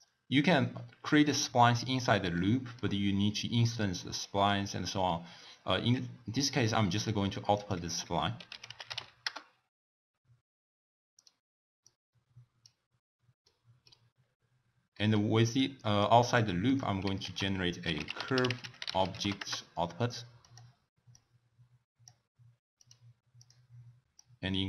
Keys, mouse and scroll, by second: 2.3-5.3 middle drag, 7.5-10.6 drag, 11.8 click, 13.5-14.1 middle drag, 14.1-14.5 scroll down 1, 14.5-14.9 scroll up 6, 14.9-15.6 middle drag, 15.6 click, 16.3 click, 17.2 ctrl+a, 21.1 drag, 23.0 click, 23.5 click, 24.1-24.6 drag.